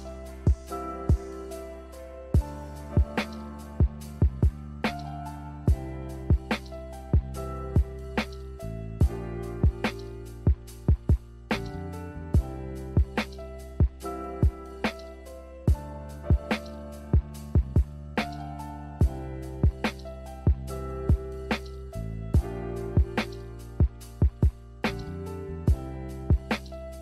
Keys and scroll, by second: 4.6 z, 6.5 z, 10.9 g, 16.3 z, 24.3-25.3 typing.